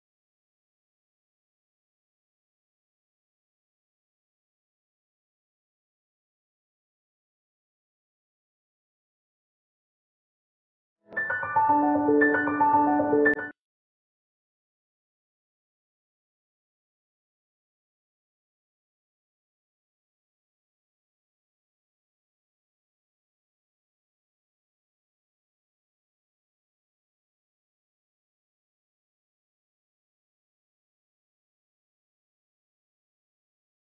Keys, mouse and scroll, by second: 0.5-0.8 scroll up 1, 2.8 click, 3.2 scroll up 1, 4.1 click, 5.1-10.8 shift+drag, 10.8 scroll up 1, 11.8-12.7 typing, 13.1 Return, 13.8 click, 16.8 click, 17.3-17.7 scroll up 1, 19.1 click, 19.5-20.5 typing, 20.6 click, 21.1 right click, 21.3 click, 21.9 ctrl+t, 22.1-23.6 drag, 23.7 click, 24.6 scroll down 1, 25.1-26.5 right drag, 26.5 scroll up 1, 27.0 scroll down 1, 27.2 right click, 28.2 scroll up 1, 28.6 click, 29.2-30.1 typing, 30.4 click, 31.2 scroll down 1, 31.7-33.5 right drag, 33.5 click, 33.7 scroll down 1.